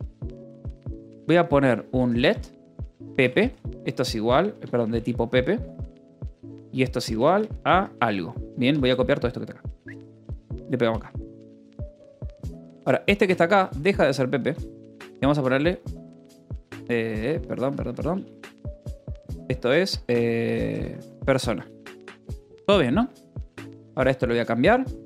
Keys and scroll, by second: 0.0-4.8 typing, 0.1 Return, 1.5 Return, 5.9-10.4 typing, 7.2 Return, 7.6 Escape, 11.3 ctrl+s, 11.5-23.8 typing, 16.5 Escape, 24.9-25.0 typing.